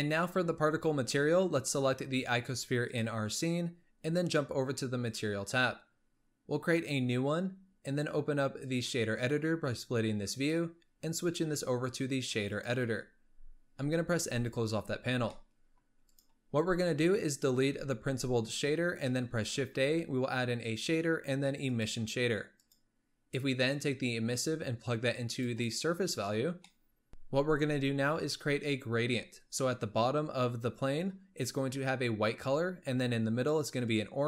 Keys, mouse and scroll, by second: 1.1-1.7 scroll down 1, 1.7-2.6 scroll down 2, 3.1 click, 3.6-5.1 scroll up 4, 5.1 click, 6.9-14.3 drag, 14.3 n, 14.7-15.4 scroll up 7, 15.4-16.2 middle drag, 16.2 click, 17.7 x, 19.2 shift+a, 23.8 drag, 26.5 scroll down 3, 26.7 middle click, 32.3-33.0 scroll up 1, 33.0-34.2 scroll up 1.